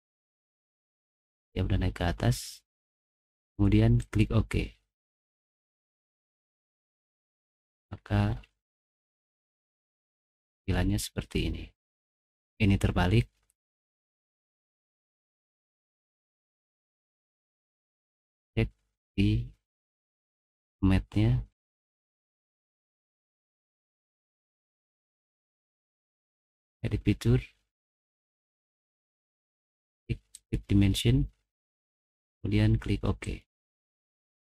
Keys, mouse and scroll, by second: 4.0 click, 6.3 click, 6.6 middle click, 7.4-8.8 scroll up 7, 7.6 middle click, 8.0 middle click, 8.8-10.1 middle drag, 10.2-10.5 scroll down 1, 10.7 middle click, 14.5 middle click, 15.1 middle click, 15.6 middle click, 16.2 middle click, 16.7 middle click, 18.2 click, 18.3 middle click, 18.3 scroll down 1, 18.6 click, 21.5 click, 24.4 click, 26.7 click, 30.4 right click, 33.2 click.